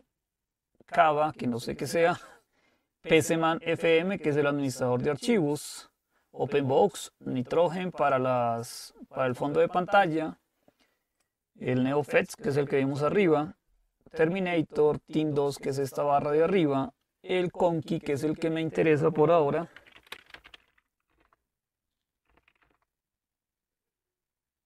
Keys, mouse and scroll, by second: 3.7-6.7 drag, 7.8-10.8 drag, 11.2-12.9 drag, 19.6-22.8 typing.